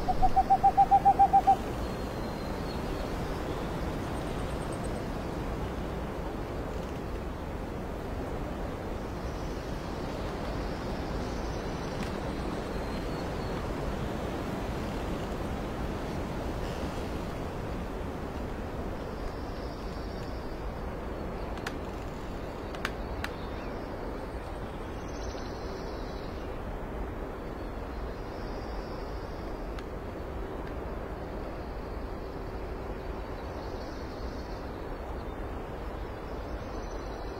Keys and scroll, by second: 0.4 space, 1.0 space, 8.0 ctrl+j, 9.8 ctrl+z, 10.2 space, 10.8 ctrl+t, 11.0 Return, 11.6 ctrl+z, 12.9 space, 13.5 space, 14.5 space, 15.2 alt+space, 15.9 space, 16.5 x, 17.2 x, 18.4 space, 20.7 alt+space, 22.6 x, 23.1 x, 24.0 x, 25.6 x, 26.1 alt+space, 28.1 space, 28.8 ctrl+t, 30.1 ctrl+t, 35.4 space.